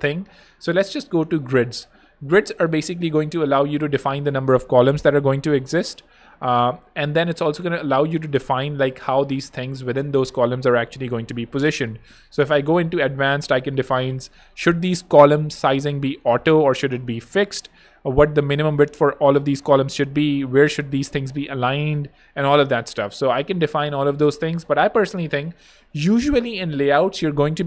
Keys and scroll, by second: 4.7 3, 6.1 super+a, 6.4 super+2, 6.5 Home.